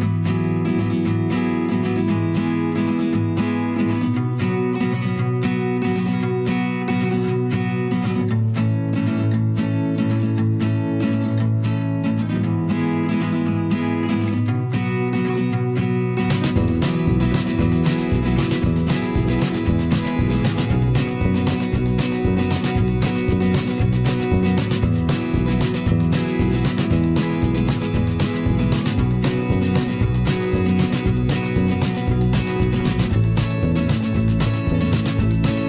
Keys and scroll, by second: 0.8 ctrl+shift+[, 2.9 i, 3.0 u, 3.3 i, 3.7 v, 6.4 a, 8.1 v, 9.4 i, 9.8 v, 11.1 ctrl+shift+[, 13.7 p, 14.8 v, 15.1 ctrl+shift+[, 15.7 ctrl+shift+[, 17.3-19.7 typing, 21.6 ctrl+shift+[, 23.0 ctrl+shift+[, 30.5 p, 34.8 ctrl+z.